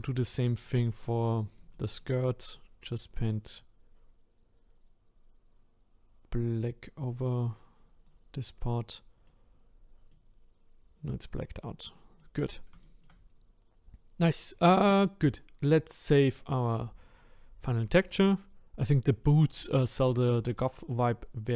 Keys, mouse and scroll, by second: 3.3-6.4 drag, 8.6 middle click, 9.5-10.1 scroll up 5, 10.1-11.3 middle drag, 11.3-11.8 scroll down 5, 11.9 middle click, 12.5-12.8 scroll down 2, 12.8 shift+middle click, 13.3-16.8 scroll up 1, 16.8-19.2 drag, 19.2 middle click, 19.7-20.0 scroll down 1, 20.0 middle click, 21.0-21.4 scroll up 1, 21.4-21.5 middle drag.